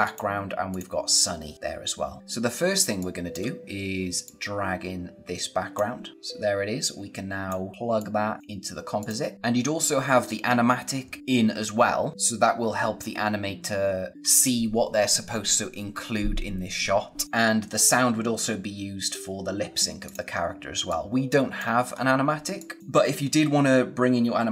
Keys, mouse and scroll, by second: 2.2-2.6 scroll down 1, 2.6 space, 2.9 click, 3.1 space, 4.1 click, 7.7 scroll up 1, 7.9 click, 11.2-12.0 scroll down 1, 12.0 scroll up 1, 12.1 scroll down 1, 12.6-13.3 scroll up 1, 17.2 click, 19.9 click, 20.5 space, 20.8 click, 21.1 space, 21.8-22.5 scroll up 1, 22.5 click.